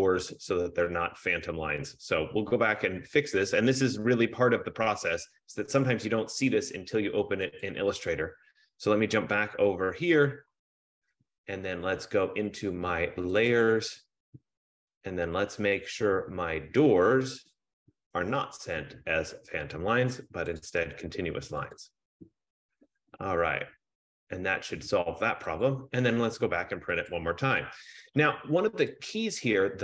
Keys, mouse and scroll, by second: 7.8 click, 8.2 click, 10.0 click, 13.7 click, 17.5 click, 18.6 click, 20.7 click, 21.8 click, 25.7 click, 27.2 click, 29.1 click.